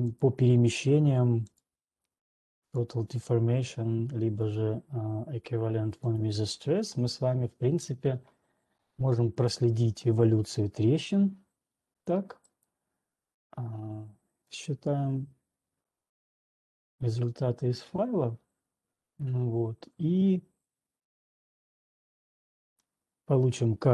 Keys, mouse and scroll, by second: 0.5 click, 2.0 click, 3.0 click, 4.5 click, 6.5 click, 13.0 click, 15.0 right click, 23.5 middle click.